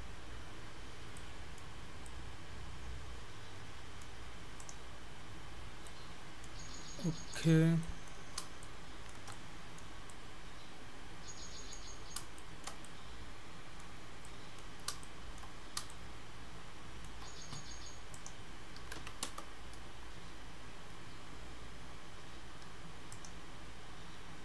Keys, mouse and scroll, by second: 0.1-0.4 scroll down 4, 0.3-0.8 scroll up 4, 0.8-1.1 scroll down 1, 1.2 middle click, 1.6 scroll up 1, 1.9-2.6 scroll down 3, 2.1 middle click, 4.6 click, 5.3 scroll up 1, 5.6 scroll down 1, 5.7 scroll down 3, 5.9 middle click, 7.4 click, 7.9 middle click, 8.3-8.6 scroll up 2, 8.6 shift+middle click, 9.3 middle click, 10.1 middle click, 12.4 shift+middle click, 12.9 middle click, 14.3 middle click, 15.1 shift+middle click, 15.7 scroll up 1, 16.0 shift+middle click, 18.2 click, 20.1-21.3 scroll down 3, 23.2 click.